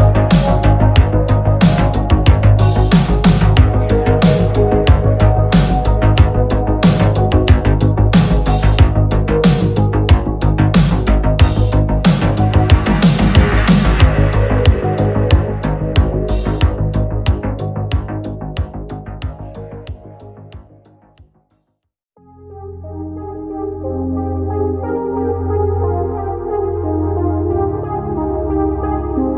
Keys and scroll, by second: 0.6 ctrl+z, 0.8 space, 1.1 ctrl+z, 1.7 ctrl+z, 2.0 space, 2.8 space, 3.2 ctrl+z, 3.5 ctrl+z, 3.9 ctrl+z, 4.2 ctrl+z, 4.4 ctrl+z, 5.2 ctrl+z, 5.5 ctrl+z, 5.9 ctrl+z, 6.3 space, 6.7 ctrl+z, 6.9 ctrl+z, 7.2 ctrl+z, 7.7 ctrl+z, 7.9 ctrl+z, 8.2 space, 9.1 ctrl+z, 9.9 ctrl+z, 10.2 ctrl+z, 13.9 ctrl+z.